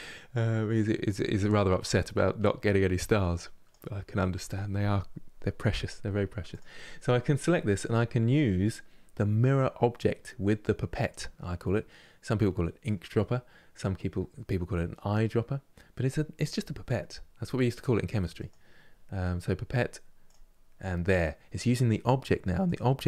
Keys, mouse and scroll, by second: 6.2-9.2 drag, 18.1-21.1 drag, 22.4 click.